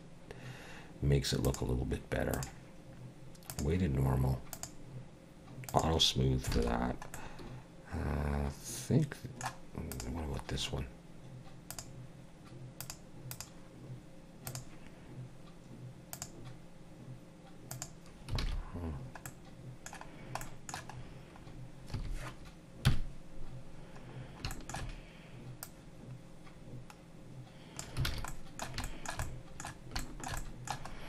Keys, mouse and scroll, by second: 1.4 click, 2.3 click, 4.5 click, 5.7 click, 6.5 alt+a, 6.7 scroll down 3, 7.1 middle click, 9.9 click, 11.7 click, 12.8 click, 13.3 click, 16.1 click, 17.7 click, 18.4 alt+a, 19.3 middle click, 20.1 scroll down 1, 20.4 middle click, 21.0-21.5 scroll up 2, 21.5 scroll down 1, 22.0 a, 22.9 KP_1, 24.2 scroll down 2, 24.5 shift+middle click, 25.6 click, 28.1 alt+a, 28.3 middle click, 28.8 shift+middle click, 29.2 middle click, 30.0 shift+middle click, 30.4 middle click, 30.9 scroll up 2.